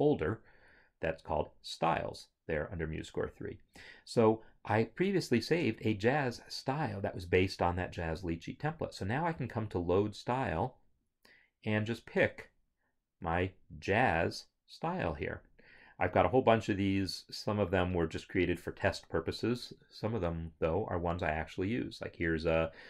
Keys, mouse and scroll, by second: 3.8 click, 6.4 click, 9.5 click.